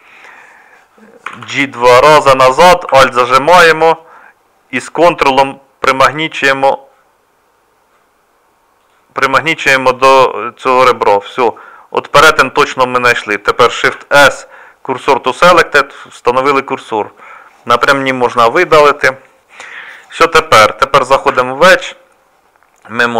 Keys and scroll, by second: 1.3 g, 13.8 shift+s, 15.5 Tab, 18.3 Delete, 21.3 Tab.